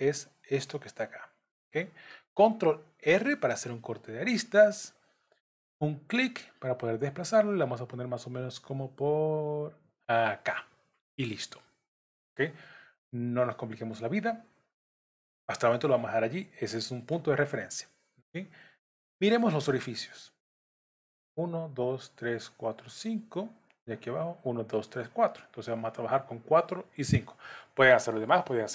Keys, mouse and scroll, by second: 1.6 middle click, 3.0 ctrl+r, 12.6 middle click.